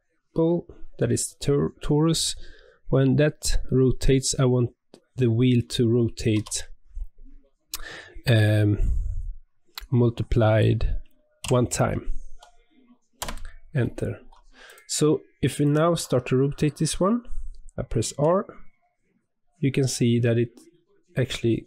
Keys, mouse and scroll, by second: 14.6 click, 15.6 click, 18.0 r.